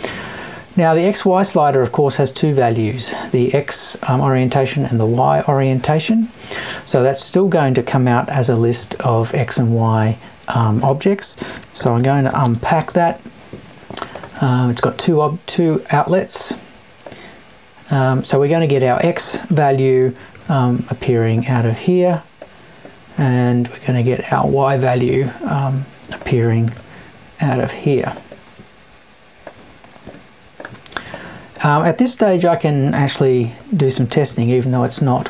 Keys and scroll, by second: 32.3 Left.